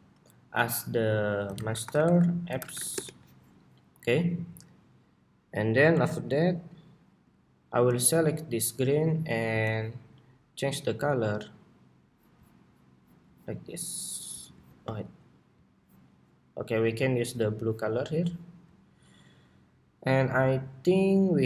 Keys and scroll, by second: 0.5 super+s, 10.3 ctrl+c, 17.3 ctrl+c.